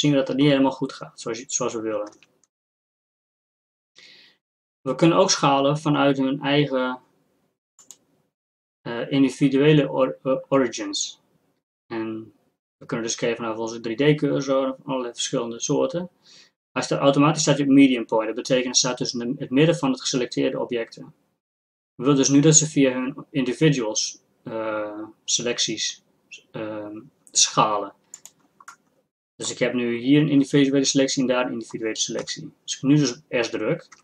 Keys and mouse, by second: 2.2 ctrl+z, 7.8-14.9 drag, 29.1-32.3 middle drag, 32.3 KP_1.